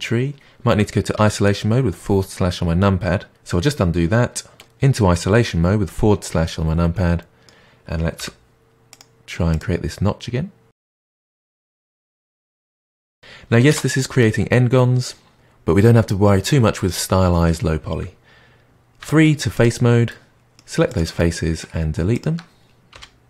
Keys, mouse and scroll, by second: 3.3 ctrl+z, 4.5 KP_Divide, 6.2-8.1 middle drag, 8.1 k, 11.3-15.3 middle drag, 19.0 3, 19.5 click, 20.0-20.8 middle drag, 20.8 shift+click, 21.1-22.1 middle drag, 22.1 shift+click, 22.9 Delete.